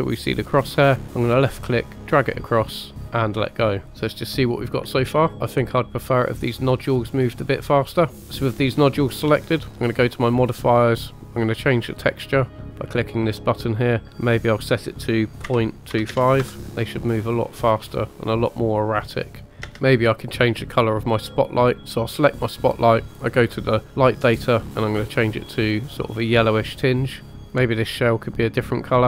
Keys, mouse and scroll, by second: 0.5-2.9 drag, 3.9 scroll down 2, 5.3 space, 5.6 click, 6.5 click, 7.1 scroll down 1, 8.2 scroll up 1, 8.2 space, 10.0 click, 12.9 click, 14.2-16.4 drag, 16.6 space, 19.5 space, 19.7 space, 21.8 click, 23.6 click, 24.2 click, 27.3 click, 28.9 click.